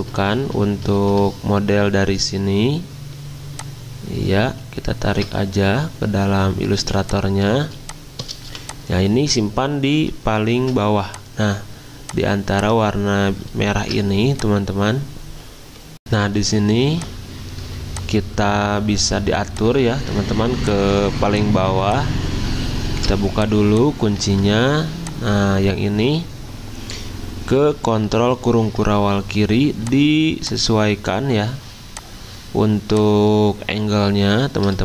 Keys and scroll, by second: 0.2 alt+Tab, 6.7 z, 8.4 v, 10.3-11.0 typing, 13.5-14.3 typing, 22.9 ctrl+alt+2, 24.3 ctrl+z.